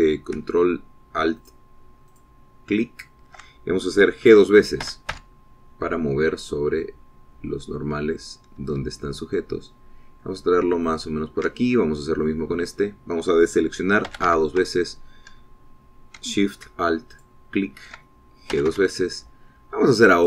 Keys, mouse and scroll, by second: 2.7 alt+shift+click, 3.5 alt+shift+click, 5.2-6.6 drag, 6.2 g, 12.2 shift+click, 15.4 a, 18.5 alt+shift+click, 19.9 g.